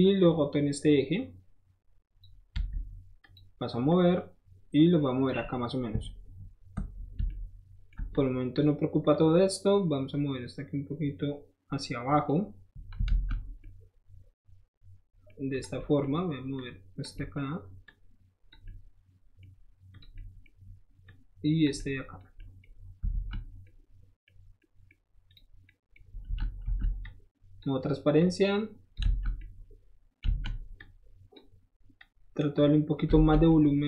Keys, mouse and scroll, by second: 0.2-2.2 drag, 2.6 q, 3.2 click, 3.9-5.2 drag, 7.3-7.9 ctrl+shift+middle drag, 8.1-8.6 ctrl+shift+drag, 9.1-12.3 ctrl+shift+drag, 13.1 alt+z, 13.1-13.6 right drag, 15.5 click, 16.5-17.0 drag, 17.2 middle click, 17.9-18.5 drag, 18.7-19.4 middle drag, 19.9 click, 20.2 scroll up 1, 21.0 click, 21.7 middle click, 22.4 middle click, 23.1 alt+z, 23.6 middle click, 24.4 scroll up 1, 24.6 middle click, 25.3 click, 25.6 middle click, 26.2 alt+z, 27.0 alt+z, 27.0 click, 28.2 click, 29.0 alt+z, 30.7 click, 32.0 click, 33.2 alt+z, 33.3 middle click, 33.4 scroll down 1, 33.5-33.8 scroll up 1.